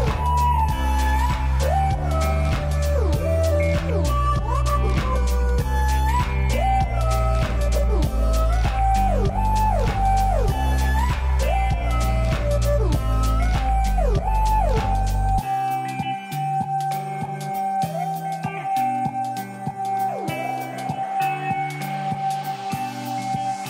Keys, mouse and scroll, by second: 3.4 right click, 8.2 click, 11.9 click, 12.3 right click, 14.4-17.7 drag, 18.9 shift+Down, 19.5 shift+Down, 19.9 shift+Down, 21.0 shift+Down, 22.3 shift+Down, 22.8 shift+Down, 23.2 shift+Down.